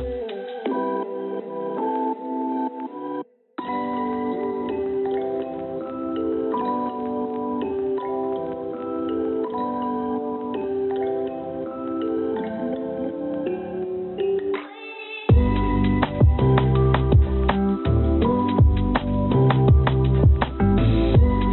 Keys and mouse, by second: 2.0 g, 6.7 click, 7.5 g, 9.8 click, 13.3-14.3 drag, 14.3 g, 17.5 click, 18.5 click, 18.7-20.7 drag, 21.1 click.